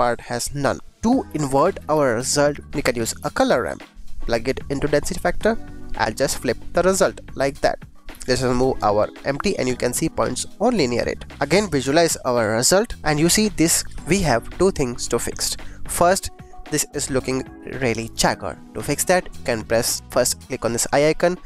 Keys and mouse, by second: 0.5 click, 0.9 shift+a, 2.7 click, 3.1 g, 3.3 click, 3.5 click, 4.0 click, 5.1 click, 6.1 click, 6.9 click, 7.9 click, 8.1 g, 8.1 x, 11.3 click, 12.4 click, 12.9-13.8 middle drag, 15.7 middle click, 18.1 middle click, 19.6 middle click, 20.4 click, 21.1 click.